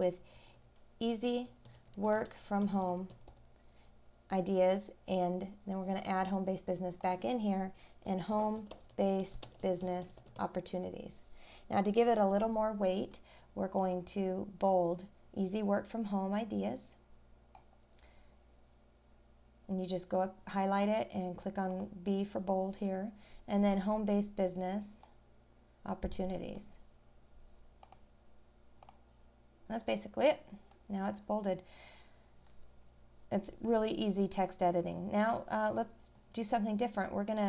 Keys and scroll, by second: 30.7 scroll down 1, 32.5-32.9 scroll down 1.